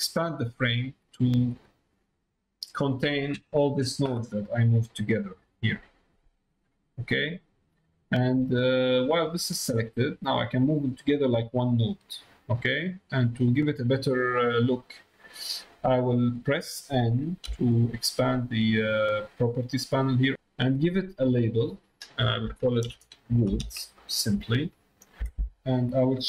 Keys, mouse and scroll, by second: 2.5 middle click, 5.1-7.2 drag, 8.9-11.9 drag, 12.3 middle click, 12.9 click, 14.6 middle click, 15.2 click, 19.8 middle click, 21.1-25.6 drag.